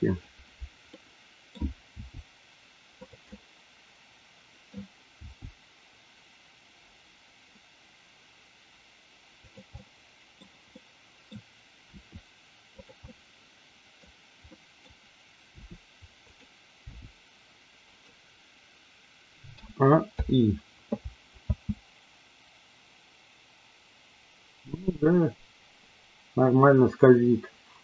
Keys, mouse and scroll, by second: 1.0 middle click, 1.9 g, 3.3-4.7 middle drag, 5.2 g, 9.4 click, 9.7-10.4 middle drag, 10.7-11.3 middle drag, 11.9 r, 12.8 click, 13.0-14.0 middle drag, 14.4-14.9 middle drag, 15.4 r, 16.8 g, 17.8 click, 19.6 a, 20.1 i, 21.4 space.